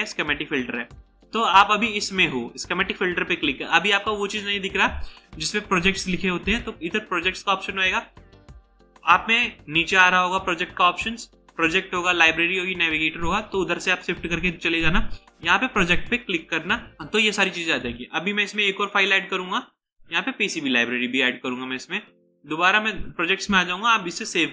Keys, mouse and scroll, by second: 17.9 right click.